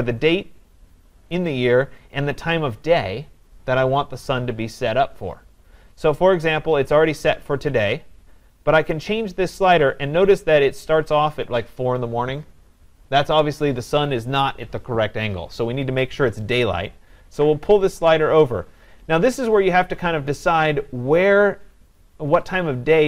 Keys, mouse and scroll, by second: 9.8 click.